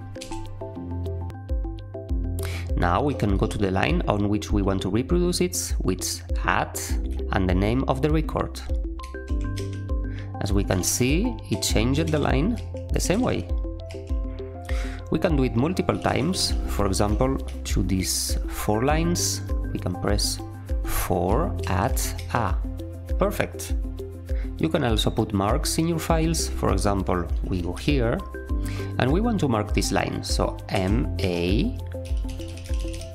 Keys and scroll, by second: 0.2 q, 2.9-3.8 typing, 9.0-12.5 typing, 12.0 ctrl+r, 13.1 ctrl+r, 13.8 typing, 15.9-17.4 typing, 20.8-22.6 typing, 27.1-28.2 typing, 30.7-33.0 typing.